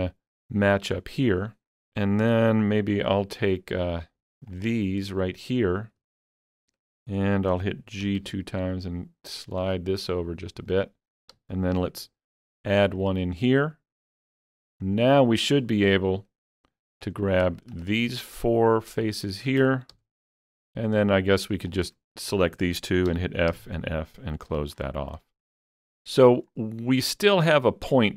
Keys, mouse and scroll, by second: 4.5 alt+g, 4.5 alt+click, 8.2 g, 10.7 shift+click, 11.8 ctrl+r, 12.9 click, 13.1 double click, 14.5 scroll up 1, 15.0 middle click, 17.1 click, 17.8 shift+click, 18.4 shift+click, 19.0 shift+click, 20.0 f, 20.6 shift+click, 23.1 f, 23.5 f, 24.5 alt+a, 24.8-25.5 scroll down 3, 25.5-28.1 middle drag.